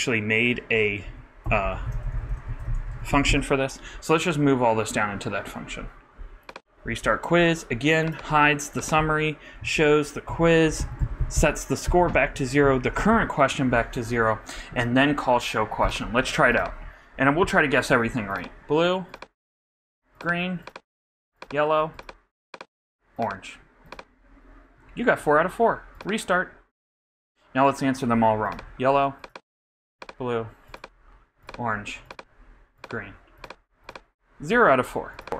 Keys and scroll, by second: 2.1-3.8 typing, 6.9 super+v, 10.7 shift+super+BackSpace, 10.8 shift+super+Right, 11.0 shift+super+Down, 12.3 shift+super+Down, 12.6 shift+super+[, 13.1 super+Right.